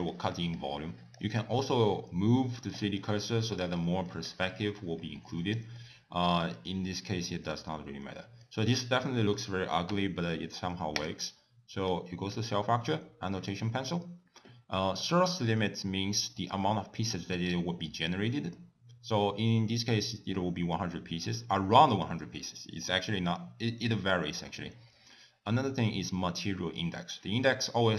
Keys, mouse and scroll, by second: 2.0 middle click, 3.1 click, 3.8 middle click, 4.3 click, 5.8 middle click, 6.6 click, 7.8 middle click, 9.9 F3.